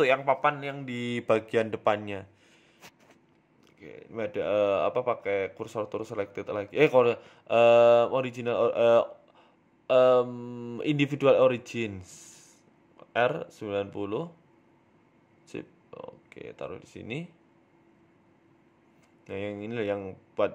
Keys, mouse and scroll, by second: 1.6 click, 2.3 shift+click, 4.7 click, 5.8 s, 7.5 s, 11.7 Tab, 11.9 s, 12.7 middle click, 13.4 g, 14.5 s, 15.6 KP_3, 16.4 r, 17.7 g, 19.6 shift+middle click, 19.9 scroll up 4, 20.1 middle click.